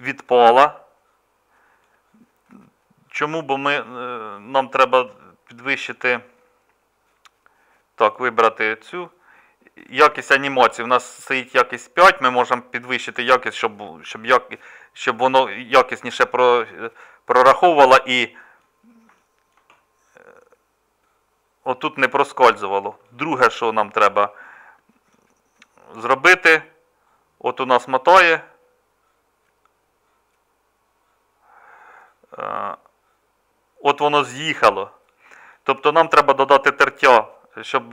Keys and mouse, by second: 0.9-19.1 middle drag, 19.5 middle click, 24.7-29.6 middle drag.